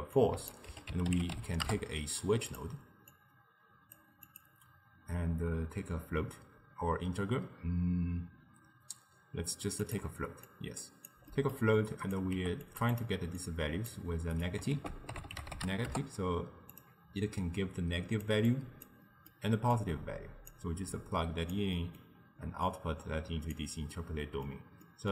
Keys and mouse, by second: 0.2 click, 3.2 drag, 4.3-7.4 drag, 10.5 click, 11.3 middle click, 11.8 click, 12.4 g, 13.0 drag, 13.4 drag, 14.8 ctrl+a, 17.5 drag, 18.6 click, 19.1-19.8 middle drag, 19.8 drag, 21.0 drag, 21.8 middle click, 22.7 click, 24.0-25.1 middle drag.